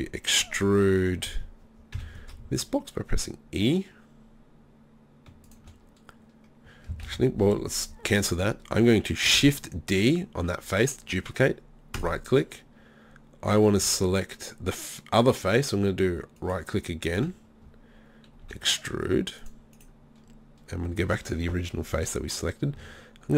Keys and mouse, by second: 2.0 e, 5.5-7.1 drag, 7.1 ctrl+z, 9.3 shift+d, 13.8 z, 16.4 click, 17.2 z, 18.4 e, 19.8 click, 19.8 right click.